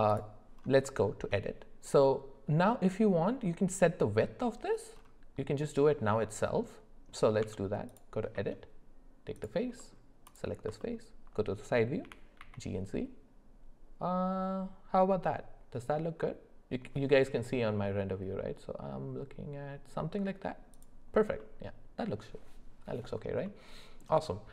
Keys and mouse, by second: 1.0 shift+middle drag, 6.6-7.1 middle drag, 7.4 Tab, 8.3 middle click, 9.8 middle click, 10.2 click, 10.8 alt+middle click, 12.0 g, 21.4 middle click, 23.4 middle click.